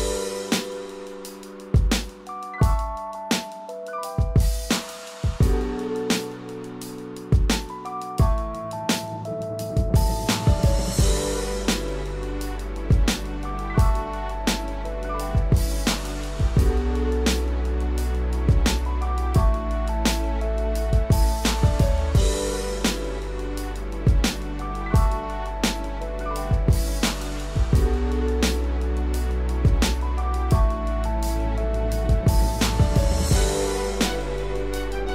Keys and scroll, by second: 2.9 ctrl+-.